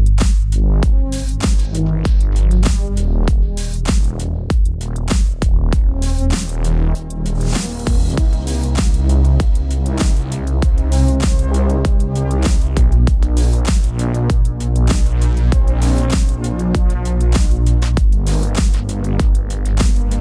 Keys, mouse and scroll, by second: 0.0-6.0 middle drag, 6.0-6.7 scroll up 3, 6.7 shift+middle click, 7.5 scroll down 1, 7.7 middle click, 8.2 2, 9.1 alt+click, 10.1 alt+shift+click, 10.9 alt+shift+click, 11.3 alt+shift+click, 12.2 shift+click, 12.6-15.2 middle drag, 15.2-15.8 scroll up 2, 15.8 shift+click, 16.5 shift+click, 16.9-18.3 middle drag, 18.3 click, 18.7-19.0 scroll down 2, 19.0 middle click, 19.7-20.0 scroll down 2, 20.0-20.2 shift+middle drag.